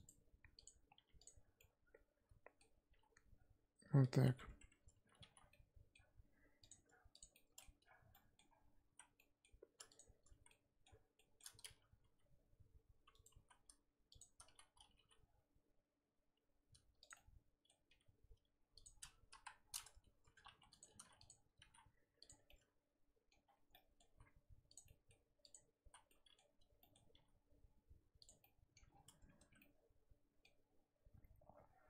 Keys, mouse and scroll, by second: 0.6 right click, 1.2 click, 1.6-2.9 middle drag, 2.9 e, 4.2 Tab, 5.2 alt+h, 5.4 scroll down 2, 5.5-6.7 middle drag, 6.7 click, 7.2 click, 7.3 middle click, 7.8 Tab, 8.0 scroll up 1, 8.1 middle click, 8.9 z, 9.1 middle click, 10.0 shift+click, 10.4 z, 10.5-12.0 middle drag, 12.0 g, 13.4 z, 14.2 shift+click, 14.5 z, 14.9 g, 17.1 middle click, 17.9 g, 19.3 KP_1, 20.8 click, 21.3 click, 21.6 g, 22.4 scroll down 2, 22.5-23.5 middle drag, 23.5 scroll up 1, 23.7 middle click, 24.1 z, 24.7 click, 24.8 middle click, 25.5 click, 25.9 z, 26.1-27.1 middle drag, 27.1 g, 28.4 middle click, 28.9-29.4 scroll down 1, 29.4 Tab, 29.6-30.6 middle drag, 30.6-31.6 scroll up 2, 31.6-31.8 scroll up 1.